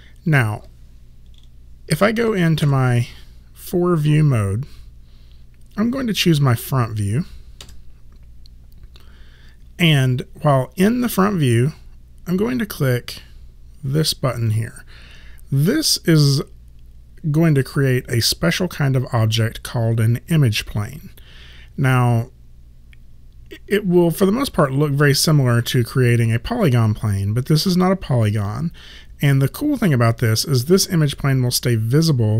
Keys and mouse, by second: 2.7 space, 7.6 space.